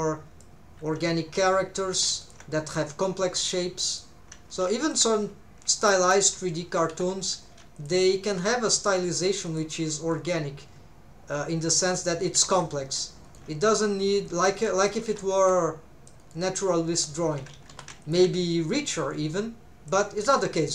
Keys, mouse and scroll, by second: 1.9 alt+a, 2.2 alt+shift+click, 3.9 click, 4.7 alt+a, 4.8 alt+shift+click, 6.2 r, 6.9 Escape, 7.4 alt+a, 7.8 alt+shift+click, 8.3 g, 9.5 shift+right click, 9.5 shift+click, 10.0 r, 11.9 click, 12.4 alt+a, 12.5 c, 13.3 right click, 13.7 1, 14.0 c, 15.2 alt+z, 15.3 c, 16.2 right click, 17.3 alt+a, 17.7 3, 18.0 alt+shift+click, 19.1 click, 20.2 r.